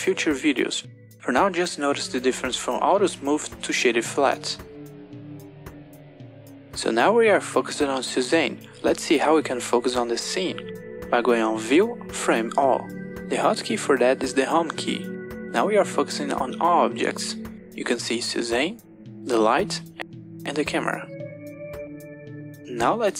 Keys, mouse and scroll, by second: 0.6-1.7 right drag, 2.5 right click, 3.9 right click, 5.1 right click, 12.4-13.8 drag, 19.5 click, 21.5 click, 22.8 click.